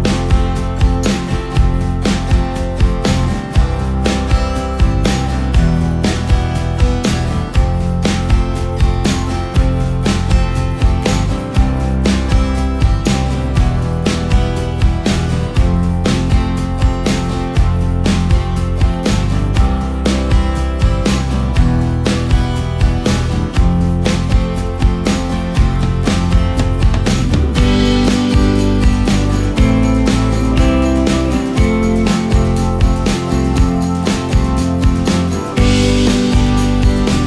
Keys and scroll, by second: 2.4 ctrl+space, 3.6 ctrl+space, 5.1 space, 7.0 ctrl+space, 7.7 ctrl+space, 16.4 space, 19.0 Delete, 24.3 Delete, 25.9 Delete, 27.1 Delete, 28.5 ctrl+space, 31.4 ctrl+g.